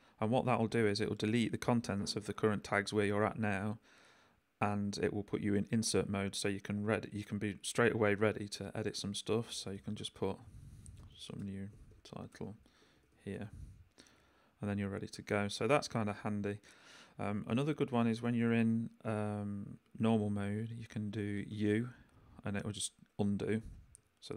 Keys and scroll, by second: 9.2-13.9 typing, 14.0 shift+super+i, 14.1 shift+super+s, 14.7 super+s, 15.4 j, 17.5 j, 17.9 k, 19.8 j, 20.2 k, 20.9 j, 21.5 u, 23.6 j, 24.0 k.